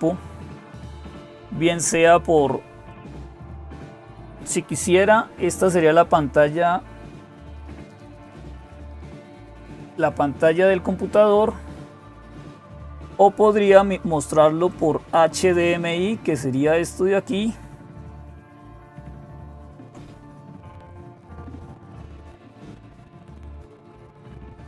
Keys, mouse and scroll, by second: 0.0-24.6 typing, 2.7 click, 14.5 click.